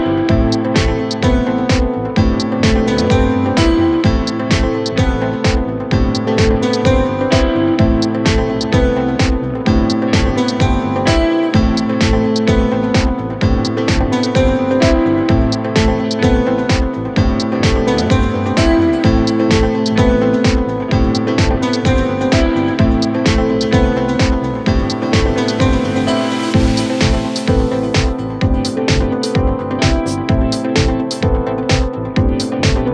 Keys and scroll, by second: 7.5 Delete.